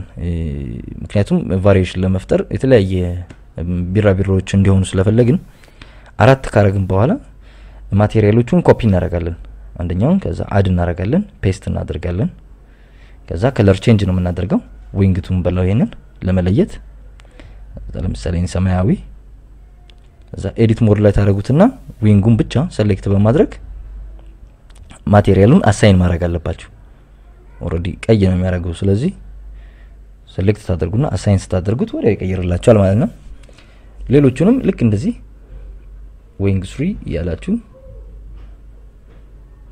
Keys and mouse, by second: 0.1 KP_Subtract, 0.4 KP_Subtract, 0.9 KP_Subtract, 1.2 shift+d, 1.6 x, 2.7 click, 3.5 KP_Subtract, 3.7 KP_Subtract, 4.2 click, 5.2 shift+d, 5.6 y, 7.0 click, 7.7 right click, 8.9 click, 10.3 click, 11.2 a, 11.9 ctrl+c, 13.1 click, 13.9 click, 15.0 x, 15.2 ctrl+v, 16.6 click, 19.8 drag, 23.4 Tab, 24.3 Tab, 25.1 click, 28.0 click, 28.7 Tab, 29.7 click, 30.6 shift+click, 31.8 ctrl+KP_Add, 32.1 ctrl+KP_Add, 34.9 Tab, 37.2 click, 38.0 click, 38.4 click.